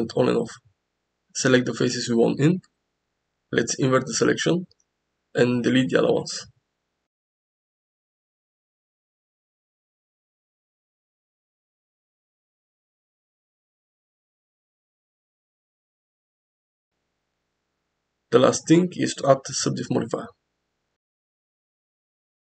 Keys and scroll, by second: 5.4 x, 14.0 x, 16.8 KP_0, 18.2 Tab.